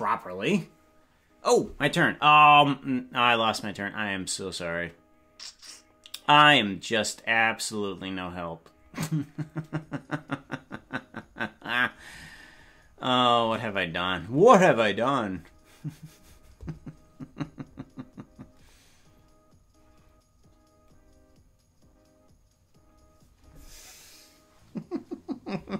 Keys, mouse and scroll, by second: 1.6 ctrl+s.